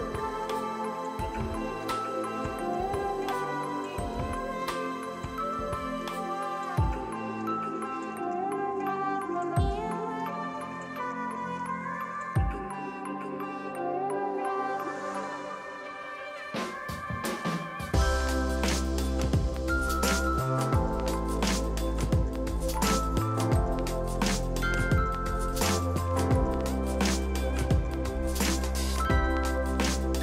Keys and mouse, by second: 0.6 ctrl+e, 0.8 click, 1.0 ctrl+shift+x, 1.2 click, 1.5 ctrl+1, 1.6 click, 1.8 Delete, 2.3 click, 2.5 Delete, 2.7 click, 4.9 Delete, 5.3 click, 5.8 Escape, 6.8 click, 7.7 Delete, 8.4 click, 9.3 right click, 10.3 click, 10.8 Delete, 11.0 click, 11.1 Delete, 11.6 click, 11.8 h, 12.1 Return, 12.5 click, 14.6 Delete, 15.5 click, 15.9 KP_3, 16.0 Return, 16.5 KP_1, 16.6 KP_0, 16.7 Return, 17.2 ctrl+z, 18.1 click, 18.9 KP_5, 19.0 Return, 19.4 1, 19.6 click, 19.7 ctrl+shift+x, 20.1 KP_5, 20.1 Return, 21.1 click, 21.7 Delete, 21.8 click, 26.3 ctrl+q, 26.4 click, 26.6 ctrl+1, 26.8 ctrl+e, 26.8 click, 27.0 ctrl+1, 27.1 click, 27.2 right click, 27.5 click.